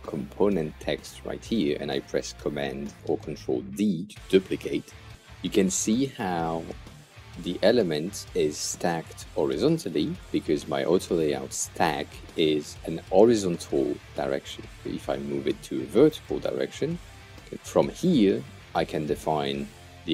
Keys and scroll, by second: 4.5 super+d.